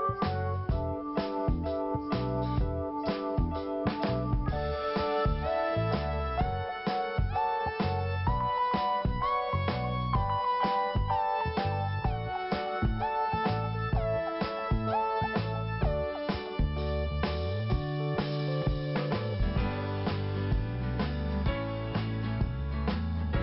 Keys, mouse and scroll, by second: 0.9 click, 2.9 click, 3.6 click, 4.7 click, 12.2 p, 13.1 scroll down 2, 14.5 click, 18.0 scroll up 1, 18.7 scroll down 1, 19.6 5, 21.6 click, 21.7 click, 22.4 click.